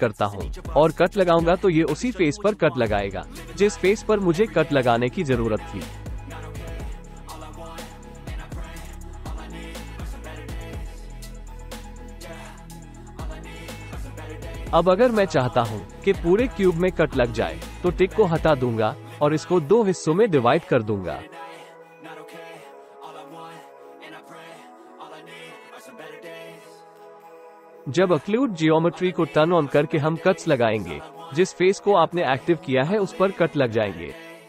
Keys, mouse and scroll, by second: 3.9 click, 9.6 click, 9.8 click, 15.2 ctrl+z, 18.7 click, 20.0 click, 25.3 middle click, 28.1-30.0 middle drag, 33.6 ctrl+z.